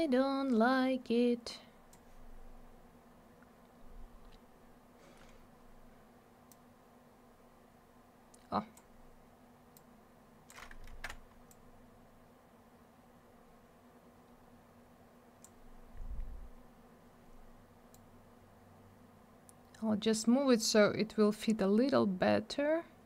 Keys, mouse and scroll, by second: 6.5 click, 9.7 click, 10.9 ctrl+z, 11.5 click, 17.9 click.